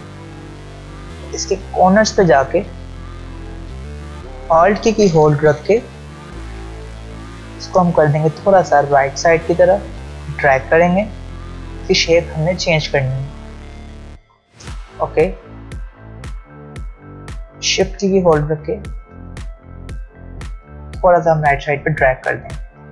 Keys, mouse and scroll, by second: 3.2 ctrl+alt+scroll down 1, 3.3 alt+scroll up 1, 7.0-14.2 alt+drag, 17.5-19.4 shift+drag.